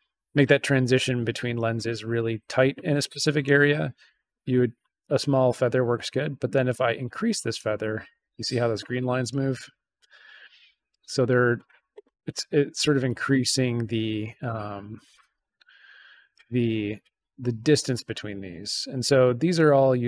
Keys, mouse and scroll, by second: 3.1 click, 5.0-7.5 drag, 8.2 click, 9.2-10.3 drag, 11.1 click, 12.5-14.4 drag, 15.1-16.3 drag, 18.3 click.